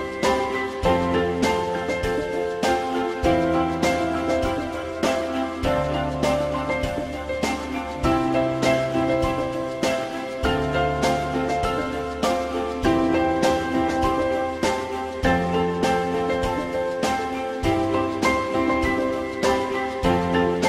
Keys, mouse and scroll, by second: 5.9 click, 7.5 e, 14.1 w.